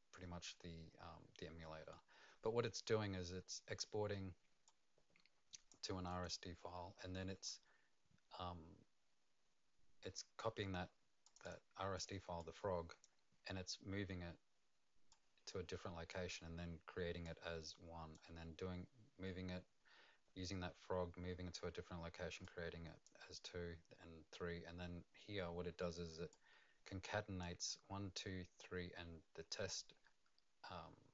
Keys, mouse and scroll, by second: 4.6 click, 6.1 click, 11.2 click, 11.4 click, 11.9 click, 12.4 click, 15.1 click, 17.2 click, 22.4 click, 26.3 click.